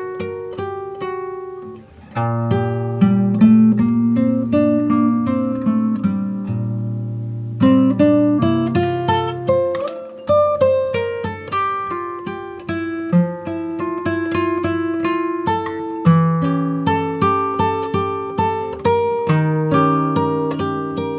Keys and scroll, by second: 3.7 ctrl+z.